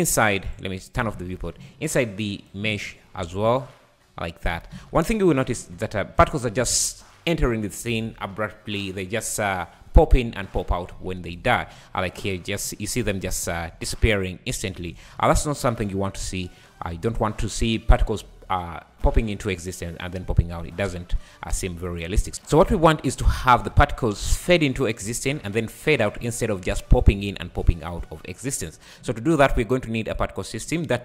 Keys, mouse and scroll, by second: 0.8 click, 1.2 `, 2.3 shift+right click, 2.8 space, 4.7 Escape, 5.3 scroll up 2, 5.6 space, 11.3-11.8 scroll down 9, 13.7 scroll up 4, 14.1 `, 14.9 Escape, 15.4 `, 16.3-16.9 scroll up 6, 16.9 scroll down 2, 21.0 space, 21.5 space, 22.0 scroll down 1, 22.3-31.0 drag.